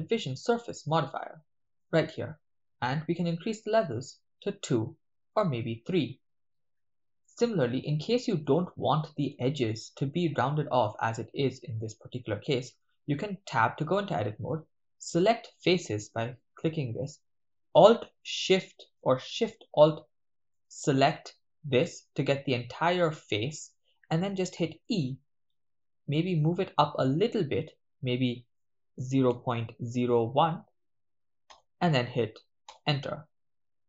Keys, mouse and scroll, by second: 3.7 click, 5.3-5.7 drag, 5.8 click, 8.1-8.4 shift+middle drag, 8.7-9.1 ctrl+middle drag, 9.5-10.0 shift+middle drag, 10.2-10.7 shift+middle drag, 13.0 Tab, 15.1 click, 16.9 right click, 20.6 alt+shift+click, 20.6 alt+shift+right click, 21.1 alt+shift+click, 25.0 e, 29.3 0, 29.6 ., 29.9 0, 30.8 1, 31.5 Return, 32.6 Return.